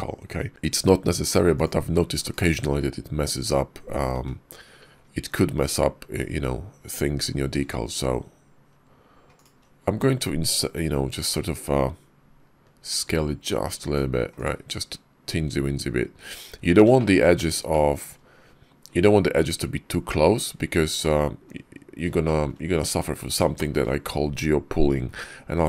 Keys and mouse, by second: 2.2 /, 2.5 `, 3.2 /, 4.0 `, 7.0 s, 9.7 s, 16.8 shift+click, 17.6 shift+click, 20.9 middle click, 21.6 KP_5, 22.1 shift+drag, 22.6 KP_5, 23.4 shift+middle click.